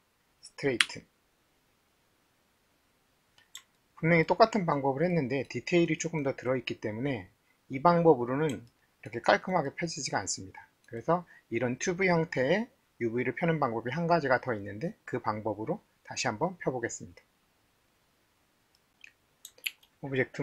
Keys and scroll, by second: 0.8 t, 19.7 alt+1.